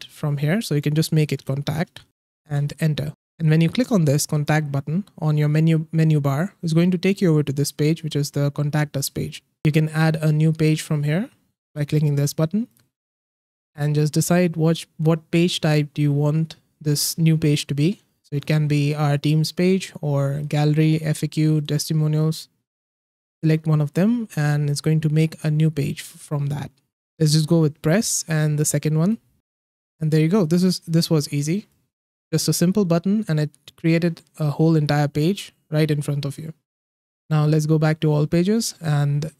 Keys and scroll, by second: 1.7 BackSpace, 2.1 t, 2.4 Return.